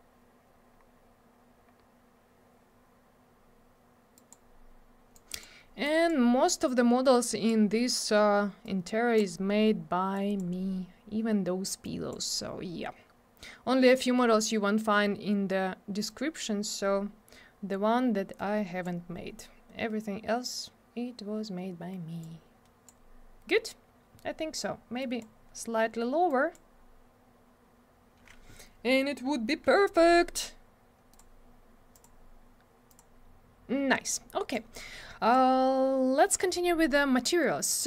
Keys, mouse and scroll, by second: 0.8 scroll up 1, 1.7 scroll down 1, 4.1 click, 4.3 click, 5.1 click, 5.8 click, 7.2 click, 8.6 click, 10.1 click, 11.8 click, 16.1 click, 18.3 click, 22.2 click, 25.0 click, 25.2 click, 26.3 click, 31.1 click, 31.1 click, 31.9 click, 32.0 click, 32.9 click, 32.9 click, 34.5 click.